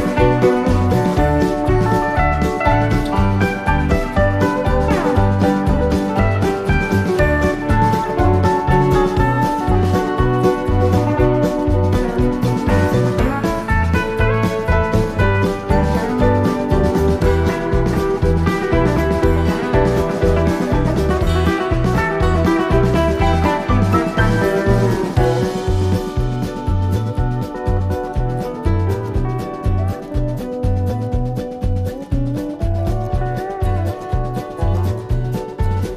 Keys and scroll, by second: 13.5 super+-, 14.5 super+=, 20.2 super+-, 31.5 i.